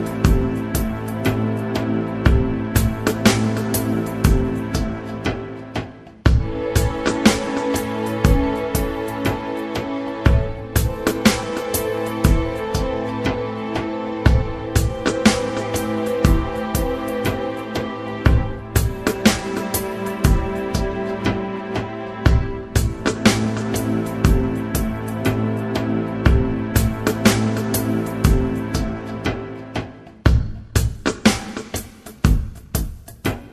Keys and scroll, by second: 8.2 ctrl+r.